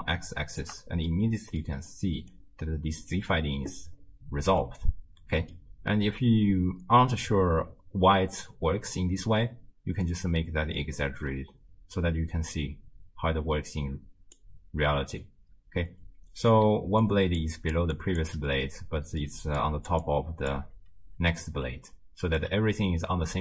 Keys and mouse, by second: 1.2-1.6 middle drag, 2.1 d, 2.3 click, 3.2 d, 3.2 d, 4.8-5.5 middle drag, 9.0-14.4 drag, 15.4-16.5 middle drag, 16.7-18.3 typing, 17.1 click, 17.6 click, 18.0 click, 18.6-19.3 middle drag, 19.3-22.4 typing, 19.6 click, 20.0 click, 21.9 click.